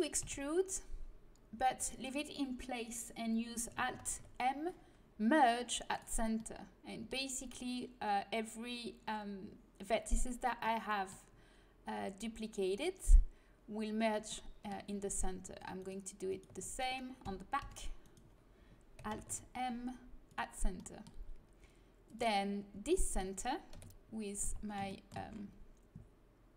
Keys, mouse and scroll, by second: 0.2 e, 3.9 alt+m, 10.6-12.6 middle drag, 14.3-15.8 middle drag, 15.7-18.2 right drag, 17.6 e, 19.1 alt+m, 22.0-23.7 drag, 23.7 KP_1, 24.4 z.